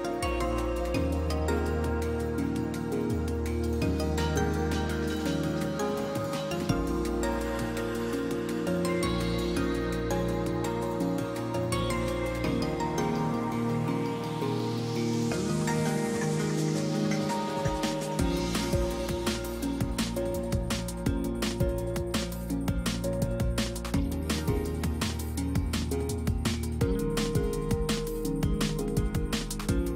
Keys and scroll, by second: 4.7 space, 6.3 space, 21.8 space, 22.6 space, 25.4 F9.